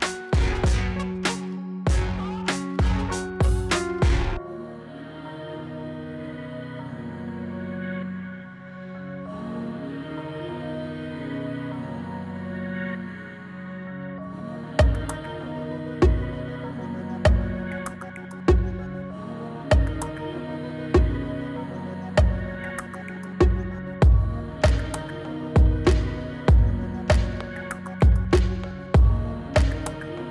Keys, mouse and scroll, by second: 0.0-1.3 typing, 2.4-4.1 drag, 6.3-7.9 scroll down 1, 7.9 click, 11.0 click, 17.1 click, 19.5 Return, 22.2 click, 26.1 Return, 28.3 click, 30.2 Return.